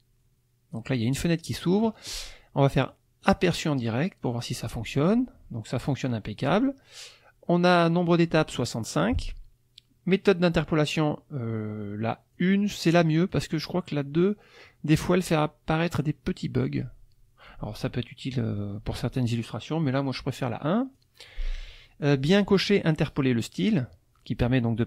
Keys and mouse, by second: 1.0 click, 3.2 click, 5.9 click, 12.4 click, 13.3 click, 21.0 click.